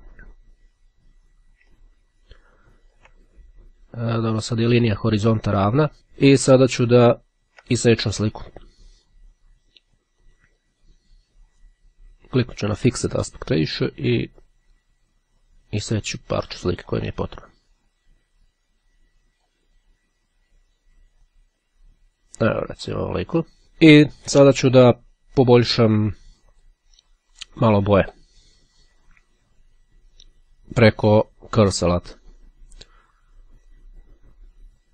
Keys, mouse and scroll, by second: 2.1-3.3 ctrl+scroll down 4, 4.5-4.9 ctrl+scroll up 2, 5.9 click, 7.1-7.7 ctrl+scroll down 2, 10.3 click, 12.7 click, 14.8-17.5 drag, 18.0-20.1 drag, 20.7-23.1 drag, 26.2-27.3 drag, 31.3-32.5 drag, 33.6-34.9 drag.